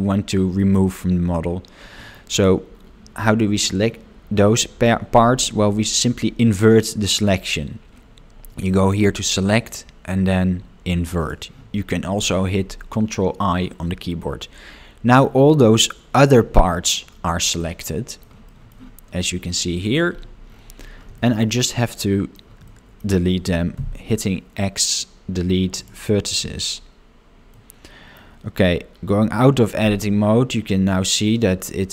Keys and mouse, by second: 8.8-11.7 drag, 14.4 middle click, 17.6 middle click, 18.5 shift+middle click, 21.2 shift+middle click, 21.6 middle click, 22.7 shift+middle click, 27.6 middle click, 31.3-31.9 middle drag.